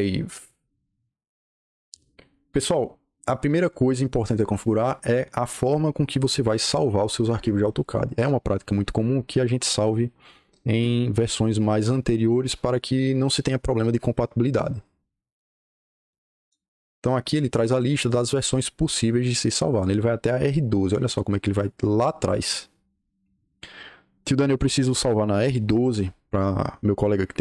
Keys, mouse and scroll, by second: 0.8-2.4 drag, 16.3 click, 18.2-19.7 drag, 27.0-27.4 drag.